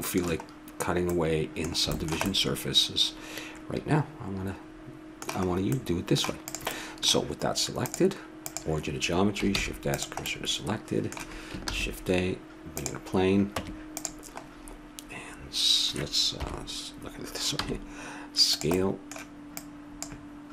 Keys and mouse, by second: 5.4-6.4 middle drag, 6.4-8.5 drag, 8.5-9.5 right drag, 9.5 shift+s, 10.3-11.6 middle drag, 11.6 shift+a, 13.5 Tab, 16.4 KP_7, 17.6 s, 19.6 click, 19.9 click.